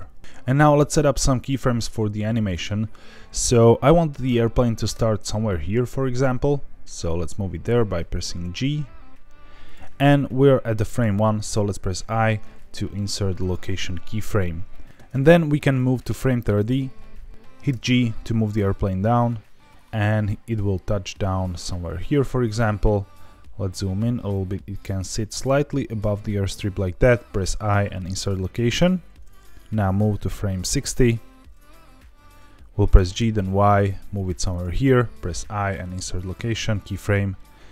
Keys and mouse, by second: 2.5 click, 4.9 g, 9.6 click, 11.8 i, 15.7-17.3 drag, 17.7 g, 22.5 click, 23.8 g, 26.4 click, 27.3 i, 29.7-31.1 drag, 32.9 g, 33.1 y, 34.4 click, 35.1 i.